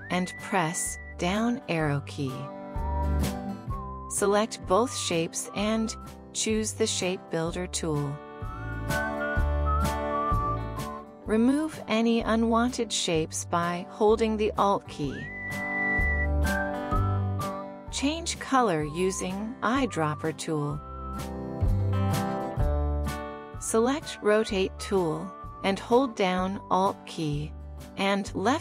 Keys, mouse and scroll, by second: 1.3 shift+Down, 7.3 shift+click, 13.3 alt+click.